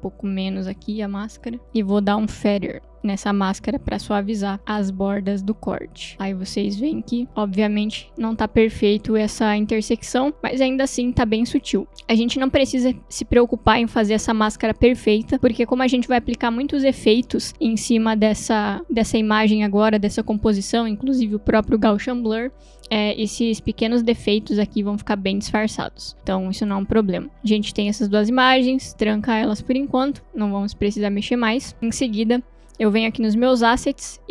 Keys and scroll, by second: 0.6 v, 3.9 f.